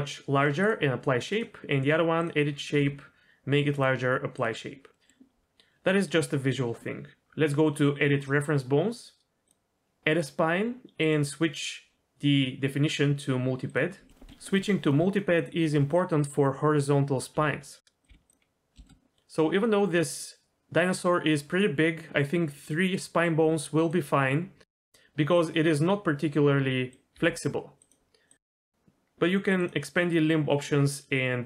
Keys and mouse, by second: 0.6 click, 1.3 click, 2.2 click, 2.7 s, 4.9 middle drag, 9.5-10.3 drag, 11.0-13.7 drag, 14.1 middle click, 14.3-15.7 typing, 14.8 click, 17.6 s, 18.1 g, 18.8 middle click, 22.5 click, 24.0 click, 24.9 g, 26.9 click, 27.8 g, 29.6-31.4 drag.